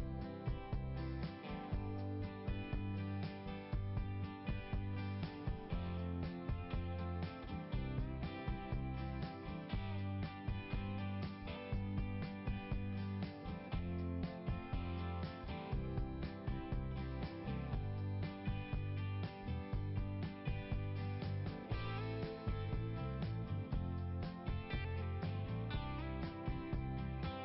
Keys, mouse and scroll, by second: 1.7 click, 5.1 click, 6.6 click, 6.9 click, 8.6 click, 10.6 click, 12.1 click, 14.1 click, 15.7 click, 17.1 click, 18.0 click, 18.8 click, 20.2 click, 24.7 click, 25.2 scroll up 1.